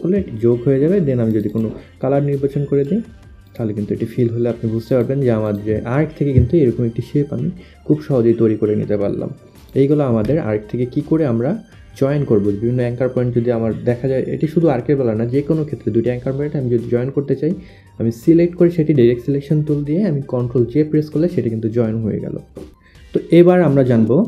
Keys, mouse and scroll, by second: 1.3 click, 3.6 click, 5.0 click.